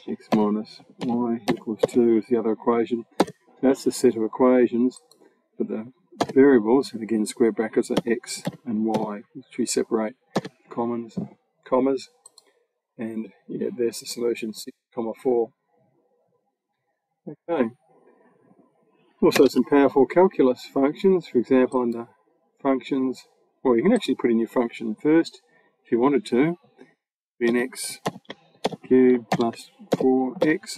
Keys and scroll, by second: 0.8 y, 1.3 =, 1.6 2, 3.0 ], 6.0 [, 7.8 x, 8.7 y, 10.2 ], 19.2 BackSpace, 27.3-30.2 typing.